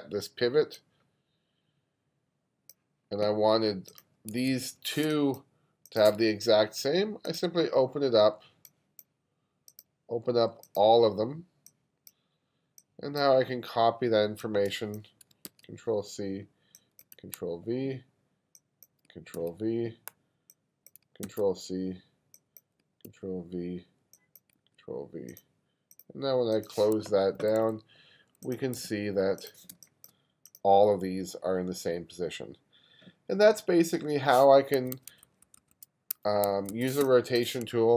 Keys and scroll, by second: 4.4 1, 5.1 space, 15.5 super+c, 17.2 super+v, 19.4 super+v, 21.3 super+c, 23.1 super+v, 24.6 super+v, 27.4 2, 28.8 2, 29.8 space, 34.8 1, 36.6 1, 37.0 space.